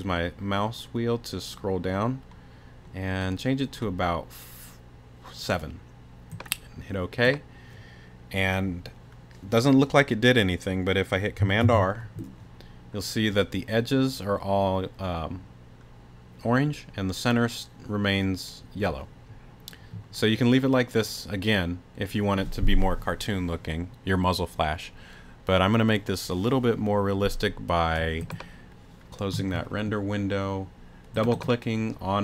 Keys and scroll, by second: 11.6 super+r.